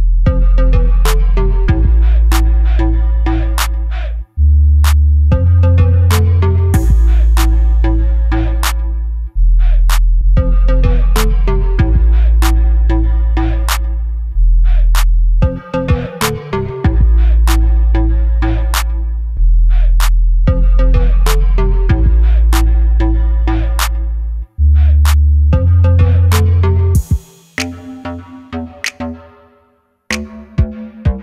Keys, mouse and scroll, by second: 0.4 click, 0.6-4.1 middle drag, 2.3 scroll up 1, 2.7 g, 4.1 click, 5.0 Tab, 5.2 click, 5.9 3, 6.0 click, 6.6 i, 8.7 click, 9.0 e, 11.0 click, 11.3 s, 12.1 click, 12.3 scroll down 1, 12.5 middle click, 13.0 Tab, 13.2 click, 13.3 scroll down 1, 13.5-16.5 middle drag, 15.8 KP_3, 16.5 click, 17.2 shift+d, 19.2 click, 20.4 shift+right click, 21.0 shift+a, 23.2 s, 23.2 click, 23.5 s, 25.2 click, 25.5 s, 26.8 click, 27.2 KP_7, 28.4 s, 30.6 click, 30.9-31.2 middle drag.